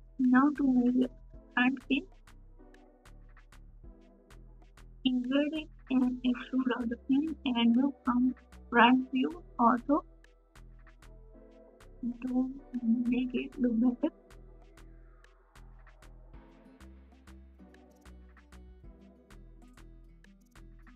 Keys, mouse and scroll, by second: 20.3 Tab, 20.4 a, 20.8 right click.